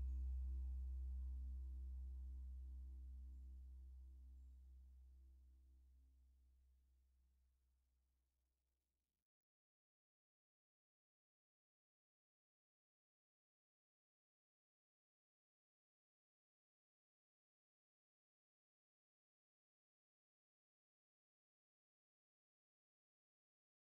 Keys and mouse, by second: 1.1 ctrl+s, 6.2 click, 8.0-9.9 drag, 9.9 F5, 10.9-12.0 drag, 15.8 F5, 19.3-19.9 drag, 20.6 click.